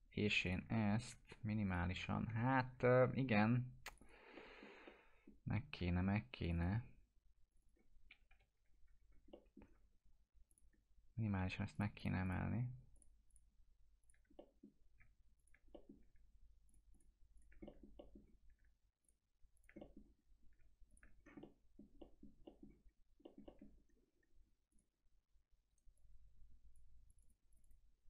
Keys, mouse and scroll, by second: 0.4 ctrl+click, 0.8 alt+middle click, 1.6 ctrl+click, 2.4 scroll up 1, 3.2 2, 3.5 scroll up 1, 3.9 click, 4.3-5.5 alt+middle drag, 6.4 ctrl+click, 8.3 ctrl+BackSpace, 9.0 scroll down 1, 9.3 alt+middle click, 10.5 click, 11.7 ctrl+click, 14.3 middle click, 15.4 ctrl+click, 15.7 middle click, 16.7 ctrl+click, 17.6 alt+middle click, 19.0 ctrl+click, 19.8 middle click, 20.2 scroll up 1, 20.9 ctrl+click, 21.1 scroll down 1, 21.4-22.3 alt+middle click, 22.4 alt+middle click, 22.8 scroll up 1, 23.2 middle click, 24.7 click, 25.7 right click, 25.9-26.9 click.